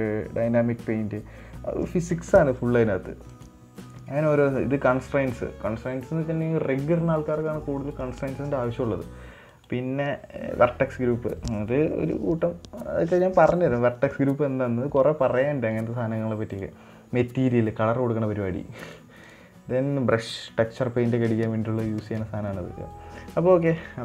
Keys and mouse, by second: 3.8 click, 17.0 click, 19.7 click.